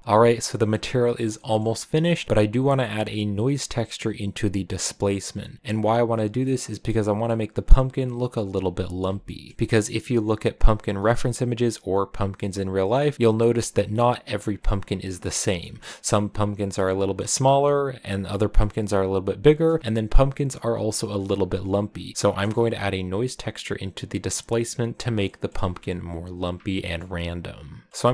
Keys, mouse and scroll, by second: 0.0-8.0 middle drag, 9.1-13.3 shift+middle drag, 15.4-18.7 shift+middle drag, 18.7-19.5 scroll up 1, 19.5-21.5 middle drag, 22.1 middle click, 22.2 KP_0, 25.1-28.1 shift+middle drag.